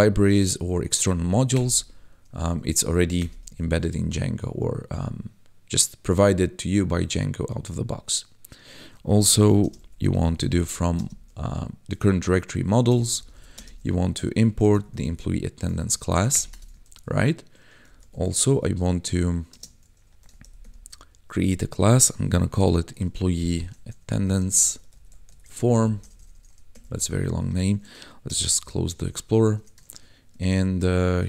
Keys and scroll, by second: 1.5 Return, 2.6 ctrl+z, 3.2 Return, 3.6 ctrl+s, 9.1-10.9 typing, 12.8-13.5 typing, 14.5 shift+e, 14.7 m, 14.9 p, 15.3 Tab, 15.8 ctrl+s, 16.3 Return, 16.8 ctrl+s, 17.8 c, 17.9 l, 18.1 a, 19.5 space, 20.2 shift+e, 20.4 m, 20.6 p, 22.2 o, 22.5 y, 23.6-26.9 typing, 28.2 ctrl+b, 29.0 shift+0, 29.5 BackSpace, 29.8 shift+9, 31.1-31.2 typing.